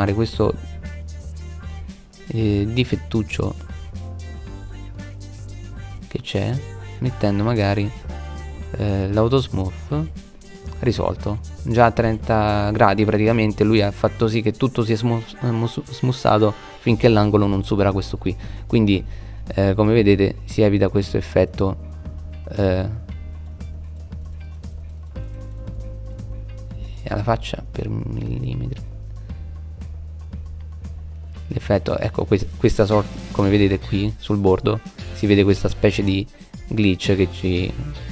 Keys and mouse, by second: 21.0-21.8 middle drag, 32.2-33.9 middle drag, 35.6 middle click.